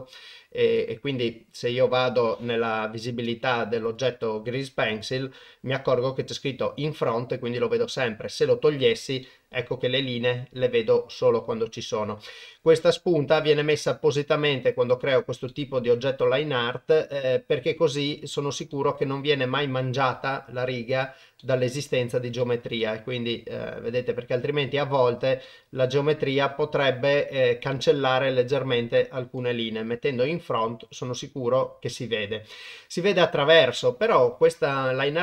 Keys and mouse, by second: 0.6 click, 3.8 click, 4.9 click, 7.9 click, 9.2-11.7 middle drag, 14.7 click, 15.5-17.9 middle drag, 18.7 shift+middle drag, 20.9 click, 21.4 middle click, 22.4 shift+middle drag, 22.8-24.9 middle drag, 25.4-26.2 middle drag, 26.9-27.7 middle drag, 27.7 click, 27.8 middle click, 27.9 click, 28.0 middle click, 29.0 middle click, 31.0-32.2 middle drag, 32.5 middle click, 33.2 shift+middle drag.